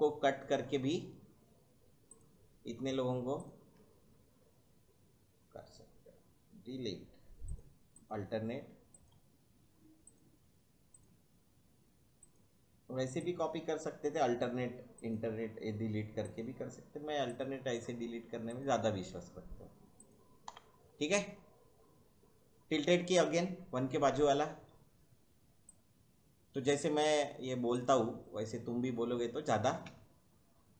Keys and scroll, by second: 6.7 Delete, 8.2 Delete, 12.5 Delete, 15.3 Delete, 18.9 Delete, 20.5 Delete, 23.4 `, 29.9 space.